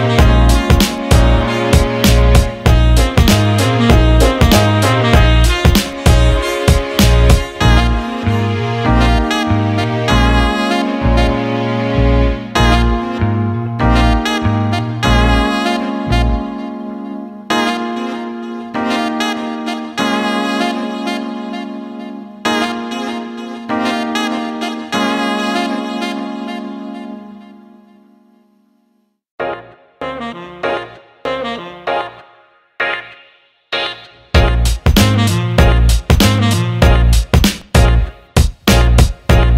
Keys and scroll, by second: 3.1 Delete, 4.0 ctrl+z, 4.5 Delete, 7.4 Delete, 24.8 Delete, 32.9 Caps_Lock, 36.5 ctrl+z.